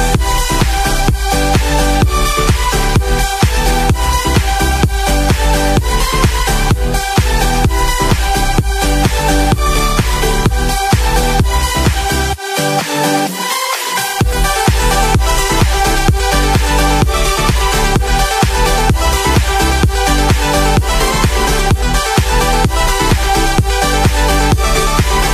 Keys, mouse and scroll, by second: 17.3 click, 23.1 click.